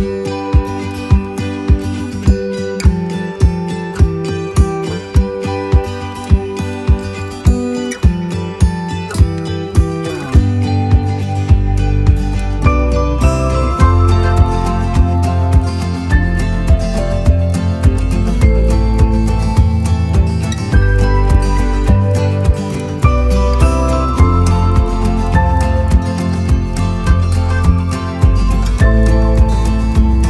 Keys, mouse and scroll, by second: 0.9 click, 2.6-5.8 drag, 7.0 click, 10.0 3, 11.4 click, 12.4 3, 13.4 click, 14.2 click, 14.6-15.8 right drag, 16.2 click, 18.0-19.8 drag, 20.6 click, 21.4 3, 22.4 click, 22.8 right click, 23.4 click, 24.2-26.2 right drag, 26.8-30.2 drag.